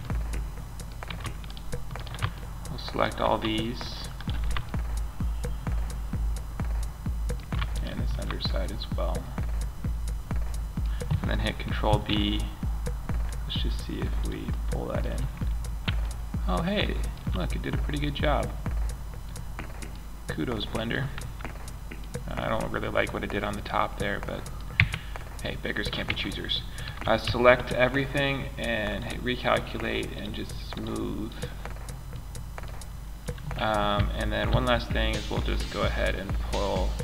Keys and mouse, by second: 11.3 ctrl+b, 18.3-18.7 middle drag, 24.1 Tab, 25.4 Tab, 26.2 a, 26.6 a, 31.5-33.5 middle drag, 33.8 ctrl+r.